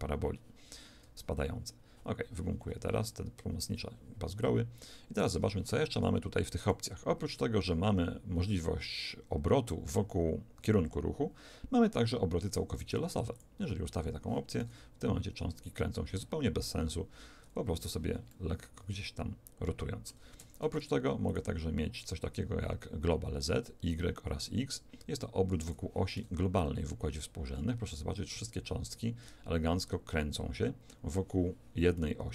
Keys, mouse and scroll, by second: 1.0 d, 2.0-5.1 right drag, 5.1 d, 5.6 d, 6.6 click, 14.5 alt+a, 18.2-20.0 middle drag, 20.3 Escape, 21.2 click, 26.1 alt+a.